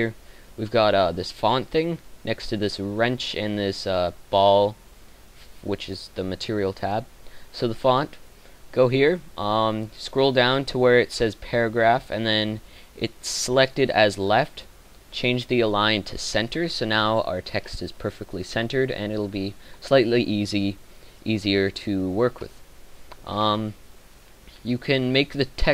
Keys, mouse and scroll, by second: 17.5-19.2 middle drag.